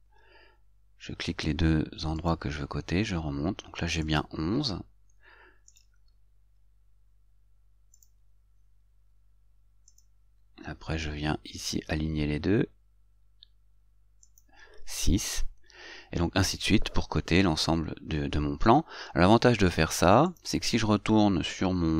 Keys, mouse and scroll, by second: 2.5 click, 4.4 click, 6.0 right click, 10.2 click, 14.6 click, 20.6 click.